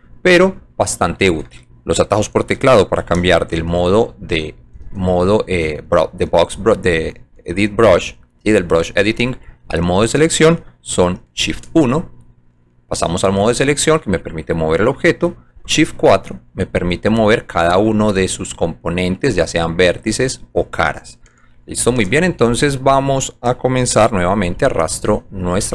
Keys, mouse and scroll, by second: 0.6 alt+click, 6.9 click, 9.4 middle click, 14.4 click, 16.7 shift+click, 17.2 shift+click, 18.1 click, 18.9 click, 20.0 click, 22.4 shift+click, 25.4 click.